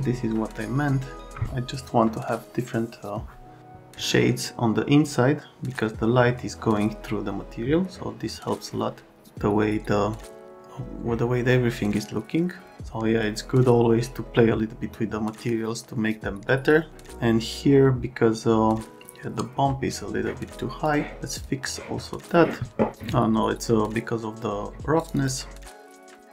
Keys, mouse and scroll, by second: 20.8 click, 21.6 click, 25.0 click, 25.1 click, 25.8 click.